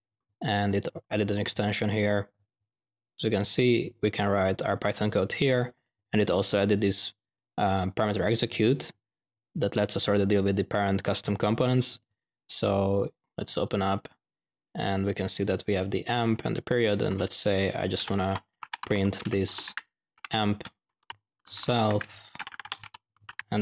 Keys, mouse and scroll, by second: 0.0 typing, 5.8-7.8 drag, 13.3-13.7 drag, 13.7 ctrl+alt+q, 16.9 click, 17.0 a, 18.6-23.6 typing.